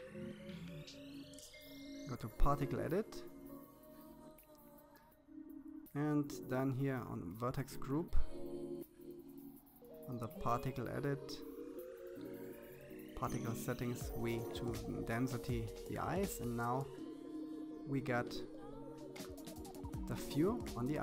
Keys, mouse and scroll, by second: 3.4-4.9 middle drag, 5.1 click, 5.9-7.3 scroll up 2, 8.5 click, 9.0-11.4 scroll down 25, 11.4-13.0 drag, 15.5 middle click, 15.9-16.6 scroll down 3, 16.6-18.1 middle drag, 18.5 KP_3, 19.8-21.0 scroll up 6.